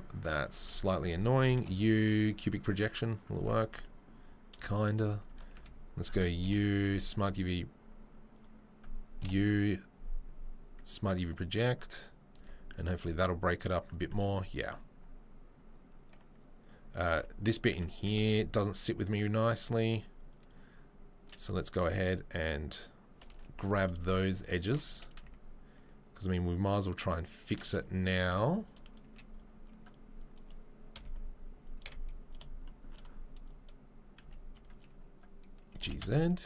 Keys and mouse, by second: 0.1 click, 0.5 Tab, 0.7 a, 1.5 u, 3.4 Tab, 5.5 a, 6.4 u, 9.2 u, 12.4 Tab, 16.6 click, 16.7-24.0 middle drag, 17.1 Tab, 18.2 ctrl+r, 22.0-23.3 drag, 23.3 2, 23.7 alt+click, 24.7-28.6 alt+middle drag, 24.9 s, 28.6 click, 28.7-36.4 middle drag, 29.0 z, 30.9 KP_3, 31.8 KP_1, 34.2 c, 35.7 g.